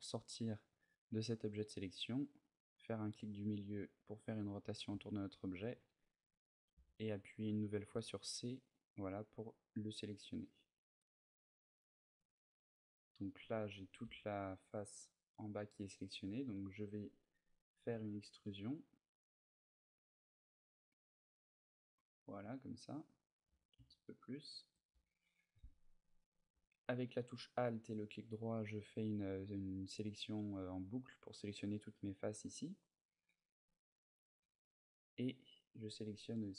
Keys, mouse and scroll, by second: 1.5 middle click, 4.1 middle click, 4.8 shift+middle click, 6.5 c, 11.7 right click, 12.2 middle click, 14.1 g, 14.4 right click, 14.8 middle click, 15.6 middle click, 22.1 click, 22.4 middle click, 23.1 g, 24.3 shift+click, 24.7 a, 25.0 middle click, 26.5 alt+right click, 30.6 middle click, 34.2 c, 34.8 right click, 35.2 middle click, 35.6 c.